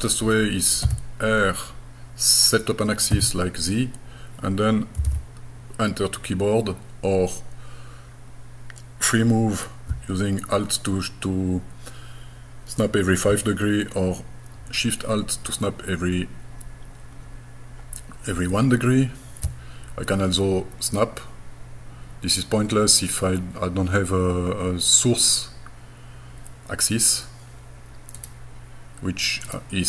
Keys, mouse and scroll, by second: 0.8 r, 5.0 KP_1, 5.1 KP_5, 28.2 right click, 29.5 right click.